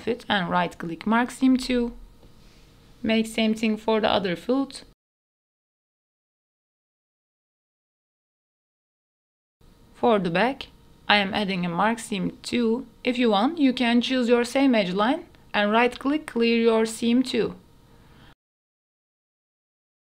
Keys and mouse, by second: 0.3 ctrl+click, 1.1 middle click, 2.1 ctrl+click, 2.3 middle click, 3.0 ctrl+click, 3.4 shift+middle click, 3.6 middle click, 3.9 ctrl+click, 4.4 ctrl+click, 5.0 right click, 6.0 middle click, 6.1 KP_Decimal, 6.2 middle click, 6.7 middle click, 6.9 click, 7.1 middle click, 7.5 click, 7.5 middle click, 7.9 shift+middle click, 8.3 middle click, 9.0 middle click, 9.3 click, 9.7 middle click, 10.2 shift+middle click, 10.5 middle click, 10.9 shift+middle click, 11.4 right click, 11.7 shift+middle click, 12.9 middle click, 13.4 shift+middle click, 14.0 ctrl+click, 14.3 right click, 14.7 shift+middle click, 15.8 alt+click, 16.1 middle click, 16.7 alt+click, 17.0 middle click, 17.7 click, 17.9 shift+middle click, 18.3 shift+middle click, 19.1 shift+middle click, 19.8 shift+middle click.